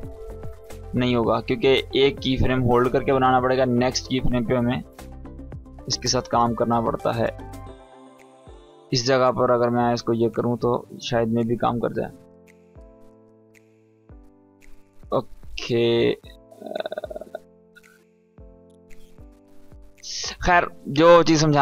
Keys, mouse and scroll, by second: 0.3 ctrl+z, 0.8-3.0 drag, 4.7 ctrl+z, 5.3-6.7 drag, 18.2 space, 19.3-20.3 drag.